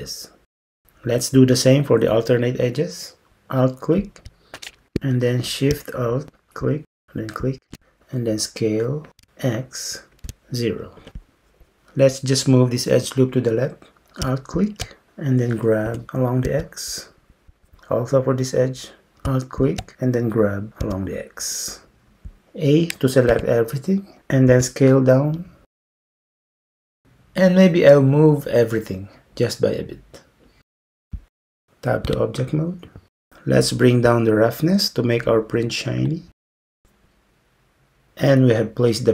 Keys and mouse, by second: 9.2 s, 14.6 alt+click, 15.9 g, 19.9 g, 23.4 a, 24.5 s, 27.9 g, 32.1 Tab, 36.1 click.